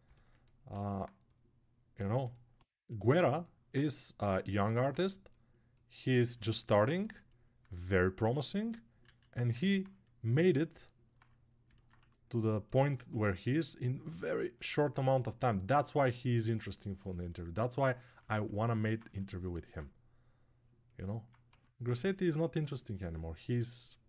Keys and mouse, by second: 0.6 alt+q, 2.4-4.6 right drag, 8.8 alt+q, 11.7 1, 21.3 2.